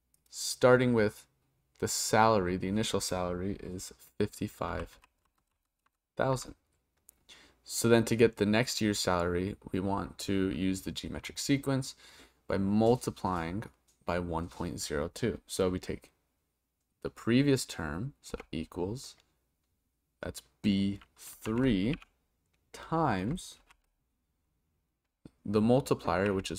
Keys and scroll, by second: 18.3 =, 21.4 shift+b, 21.9 3, 23.6 shift+8.